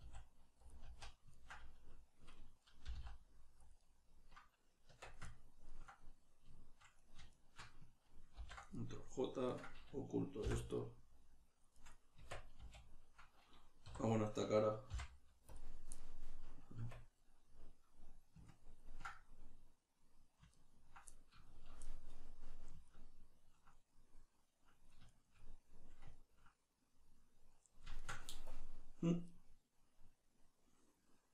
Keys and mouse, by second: 0.0 s, 0.7 click, 0.9 z, 1.3 ctrl+middle click, 2.9 g, 3.6 middle click, 3.7 click, 4.9 Tab, 5.3 ctrl+middle click, 7.0 right drag, 7.3 shift+right click, 8.4 ctrl+j, 8.7-9.5 middle drag, 9.5 right click, 10.5 h, 10.8-11.7 middle drag, 11.7 right click, 12.2 Tab, 13.9 3, 14.1 right click, 14.9 x, 16.0-31.3 middle drag, 16.8 Tab.